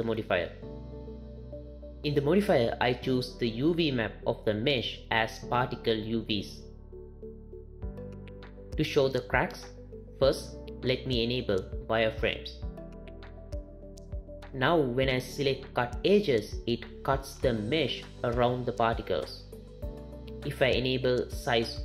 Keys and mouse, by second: 4.6-6.9 drag, 9.1-12.3 drag, 17.3 click.